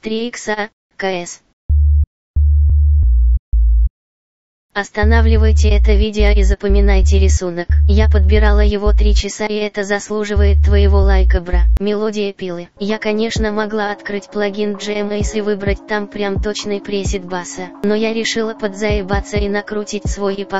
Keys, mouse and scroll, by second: 1.5 click, 11.7 F1.